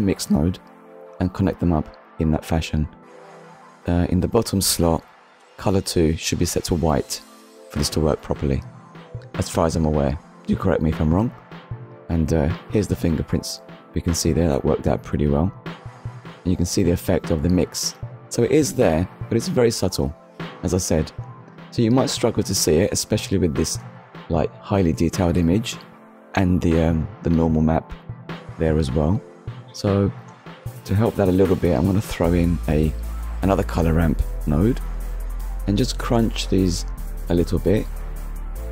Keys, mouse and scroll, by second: 1.9 click, 3.1 click, 4.3 click, 7.6 middle click, 10.3 ctrl+shift+click, 11.2 middle click, 12.2-12.6 scroll down 1, 12.9 middle click, 15.0-15.4 scroll up 1, 15.8 ctrl+shift+click, 16.6 middle click, 18.6-19.0 scroll up 1, 19.5 scroll up 1, 20.1 middle click, 21.0 scroll down 1, 22.6 ctrl+shift+click, 23.4 middle click, 24.4-24.8 scroll down 1, 25.0 scroll down 1, 26.0 click, 27.3 shift+a, 28.2 click, 29.1 click, 31.0 click, 32.7 middle click, 34.0 ctrl+shift+click, 35.1 scroll up 1, 38.1 click.